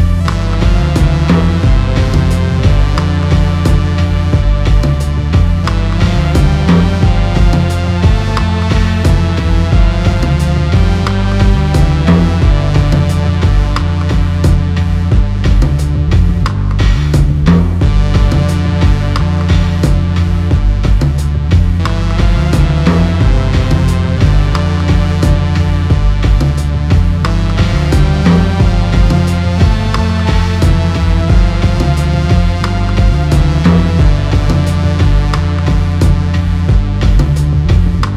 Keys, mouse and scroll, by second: 0.8 click, 2.3 Tab, 3.1 middle click, 4.8 click, 5.5 click, 6.7 g, 10.1 KP_1, 13.2 r, 18.6 g, 23.1-24.5 scroll up 5, 24.6 shift+middle click, 25.7-26.0 scroll up 4, 26.4 shift+middle click, 27.5-27.9 scroll up 3, 29.0 shift+middle click, 31.1 click, 33.3 ctrl+z, 34.2 g.